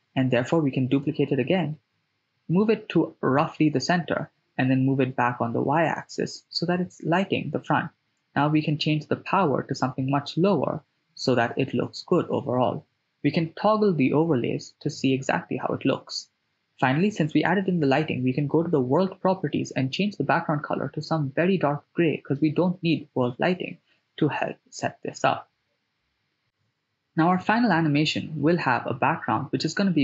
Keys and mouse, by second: 1.1 click, 1.2 drag, 1.9 g, 2.1 y, 5.6 click, 6.6-8.4 drag, 7.9 0, 11.3 click, 14.0 click, 16.0 click, 23.1 click, 26.9 right click, 27.6 shift+a.